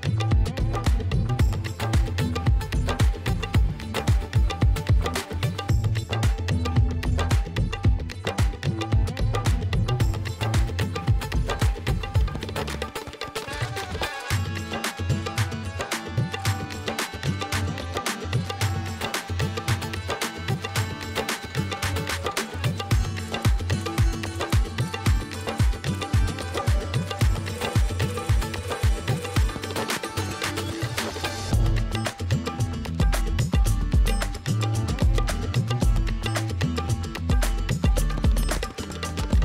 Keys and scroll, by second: 3.1 space, 3.5 space, 5.6-6.8 typing, 7.1 ctrl+j, 7.3 ctrl+alt+z, 7.6 ctrl+alt+z, 8.4 ctrl+alt+d, 8.5 Return, 8.6 ctrl+j, 8.7 ctrl+t, 10.3 Return, 10.4 space, 10.7 space, 12.1 ctrl+e, 12.2 ctrl+space, 12.3-13.4 typing, 21.6 space, 21.9 ], 22.6 space, 22.9 space, 24.1-26.3 typing, 27.8-32.3 typing, 35.6 ctrl+d, 35.6 space, 35.8 ctrl+Tab, 35.9 space, 36.2 f, 37.8 f, 38.0 space, 38.6 ctrl+t.